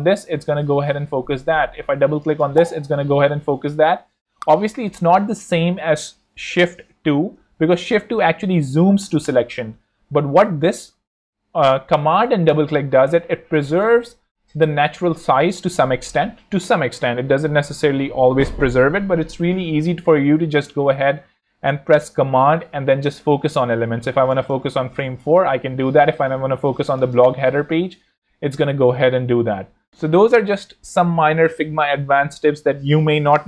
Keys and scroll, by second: 7.0 shift+2, 7.6 shift+z, 9.1 space.